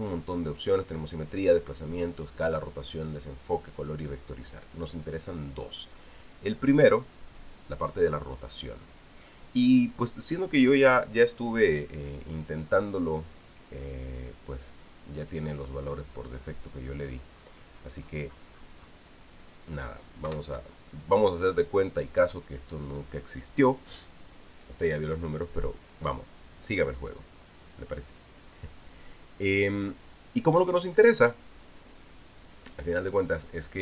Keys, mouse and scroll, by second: 7.8 click, 16.0 click, 18.1-18.8 scroll down 4, 20.1 click, 21.1 1, 29.7-32.3 drag.